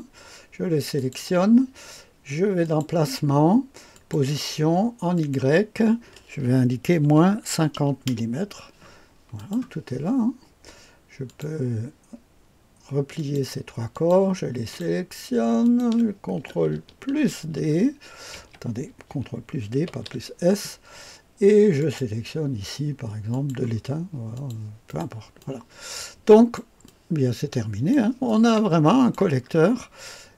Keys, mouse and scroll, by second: 0.9 click, 2.6 click, 3.9 click, 5.1 click, 7.0 KP_Subtract, 7.4 KP_5, 7.7 KP_0, 9.4 click, 11.3 click, 13.2 click, 13.9 click, 14.7 click, 15.6 click, 17.2 ctrl+s, 17.4 ctrl+d, 18.4 Escape, 19.9 ctrl+d, 21.8 click, 23.3 click, 24.3-26.5 drag, 26.8-30.3 drag.